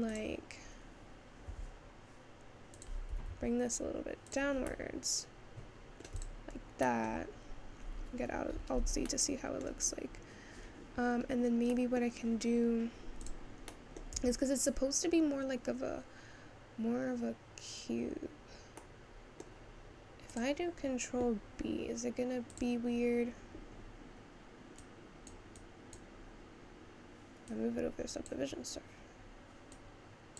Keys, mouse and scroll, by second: 0.2 click, 1.5 s, 5.0-6.2 middle drag, 6.2 click, 6.7-7.3 scroll down 2, 7.3 middle click, 7.8-8.6 scroll down 1, 8.6 alt+z, 9.1-10.6 middle drag, 10.6-11.8 scroll up 2, 11.8 middle click, 12.2-12.7 scroll up 2, 12.7-13.3 scroll down 1, 13.3 click, 13.8 middle click, 14.3 Tab, 14.7-15.9 scroll down 2, 18.9-20.3 middle drag, 22.6-30.3 drag.